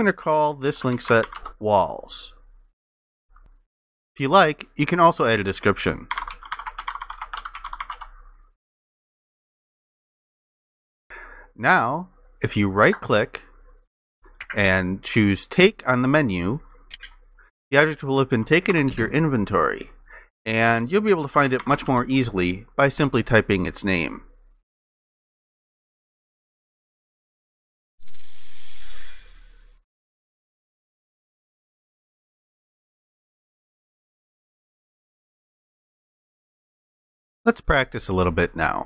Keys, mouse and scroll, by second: 0.5-1.9 typing, 3.4 BackSpace, 5.9-8.5 typing, 18.8 ctrl+i, 21.0-22.4 typing.